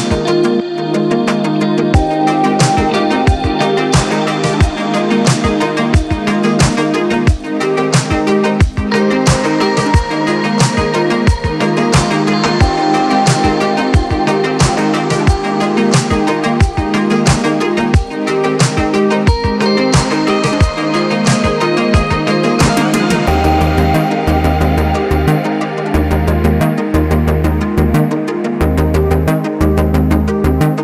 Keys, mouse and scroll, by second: 0.9-3.9 drag, 5.8-7.0 drag, 7.8 click, 8.1-10.9 right drag, 10.9 scroll up 1, 11.8-13.0 shift+middle drag, 13.0-13.4 scroll down 2, 13.4-16.0 middle drag, 16.0-18.9 drag, 18.9-19.8 scroll up 2, 19.8 shift+middle click, 20.2-20.8 scroll up 2, 20.8-23.8 scroll down 2, 30.5-30.8 drag.